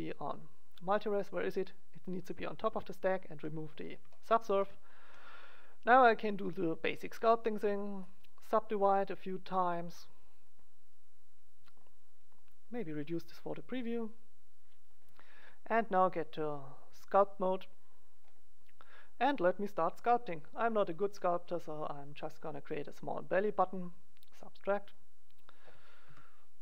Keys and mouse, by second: 1.5-4.4 drag, 4.4 middle click, 7.2-10.1 drag, 10.4-13.4 drag, 13.4 middle click, 14.0-15.7 drag, 15.9 click, 17.2 click, 18.3-20.2 middle drag, 21.5-23.3 drag, 24.3-26.1 drag, 26.1 KP_1.